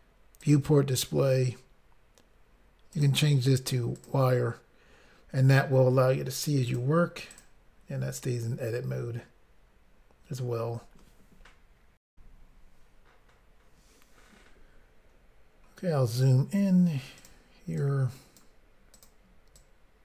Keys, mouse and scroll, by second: 0.5 click, 0.6 click, 1.2-2.3 scroll down 3, 3.0 click, 3.1 click, 4.0 click, 4.1 click, 6.7 click, 6.8 click, 7.4 click, 7.5 click, 12.1 Pause, 15.5-15.9 scroll up 2, 17.2 click, 17.7 click, 18.9 click, 19.0 click, 19.5 click.